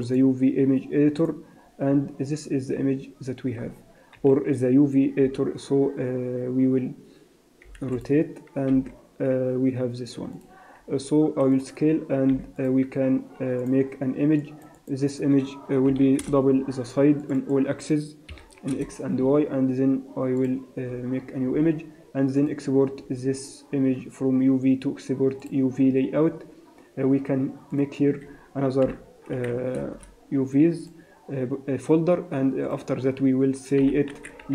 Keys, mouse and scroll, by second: 0.6 click, 2.4-3.2 scroll up 1, 3.2-3.6 scroll up 4, 3.6 scroll down 2, 4.1-4.7 scroll up 1, 4.7 a, 5.8 r, 9.3 g, 11.3 s, 12.8 g, 14.1 click, 17.9 click, 21.6-22.9 scroll down 7, 22.9 click, 22.9-23.2 scroll down 2, 28.3 click, 33.1 click.